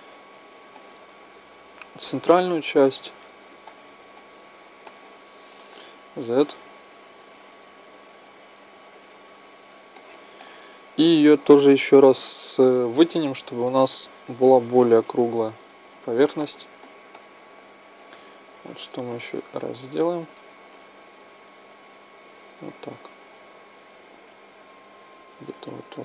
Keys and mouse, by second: 3.6-6.5 middle drag, 5.8 z, 6.5-11.1 right drag, 9.9-11.1 drag, 14.0-16.4 right drag, 15.9 z, 16.4 middle click, 17.2-25.8 middle drag, 21.1-25.8 drag.